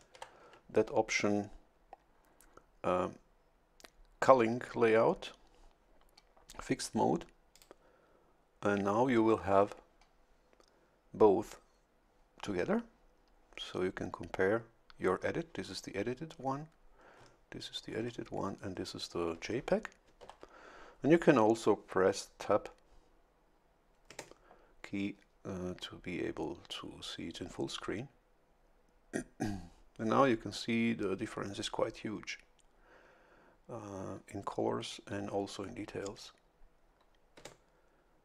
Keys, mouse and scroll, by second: 0.1 shift+F11, 7.5 click, 20.2 shift+F11, 24.1 Tab, 37.4 Tab.